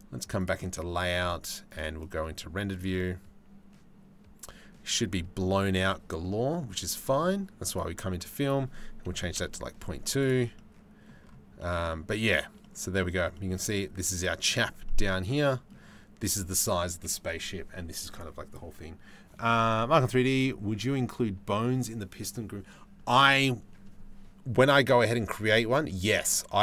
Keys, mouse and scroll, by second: 2.3 click, 7.3 click, 8.1 click, 10.2 middle click, 11.2 middle click, 12.2 middle click, 12.6 middle click, 12.8 shift+middle click.